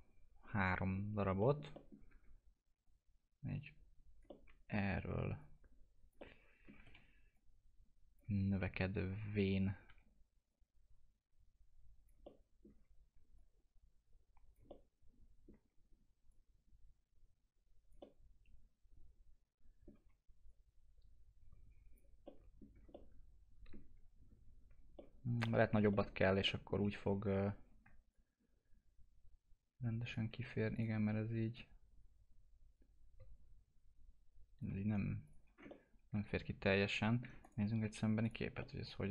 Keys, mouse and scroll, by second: 1.4 middle click, 2.1 w, 2.8 click, 4.6 alt+middle click, 5.3 click, 6.4 alt+middle click, 6.7 e, 7.3-9.2 drag, 9.2-9.5 scroll up 1, 9.8 w, 10.5-12.2 drag, 12.2 alt+middle click, 13.3-14.6 drag, 14.6-16.3 alt+middle drag, 16.3 click, 18.0-20.4 alt+middle drag, 20.4 click, 22.2 middle click, 22.7 scroll down 1, 22.9-24.9 alt+middle drag, 24.9 middle click, 28.1-30.7 shift+drag, 30.7 click, 31.5-35.2 shift+drag, 35.2 click, 35.4 scroll down 1, 35.6-37.4 alt+middle drag, 37.4 right click, 38.2 click, 38.6 alt+middle click.